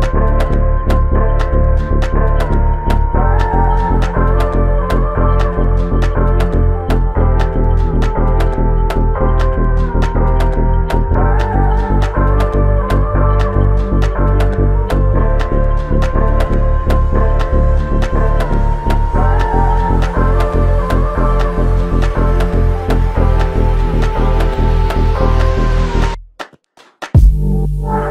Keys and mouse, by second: 0.6 alt+click, 2.7 double click, 5.6 ctrl+alt+click, 6.8 alt+click, 12.4 alt+click, 18.9 alt+click, 22.3 alt+click, 27.9 shift+click.